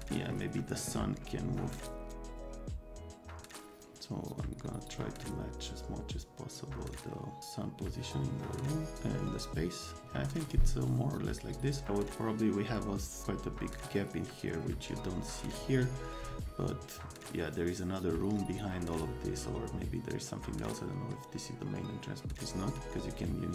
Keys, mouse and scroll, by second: 1.7 click, 2.1 click, 2.3-10.0 drag.